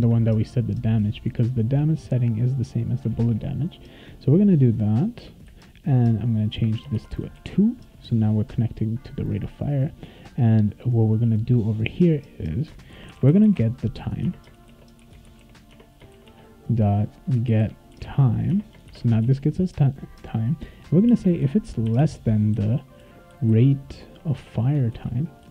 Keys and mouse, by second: 0.0 ctrl+c, 1.4 click, 3.2 ctrl+v, 5.2 ;, 6.8 BackSpace, 6.9 2, 7.3 ctrl+s, 11.6 click, 11.8 click, 12.6-19.3 typing, 14.2 Tab, 21.1-24.0 typing, 24.4 Tab, 24.9 ctrl+s.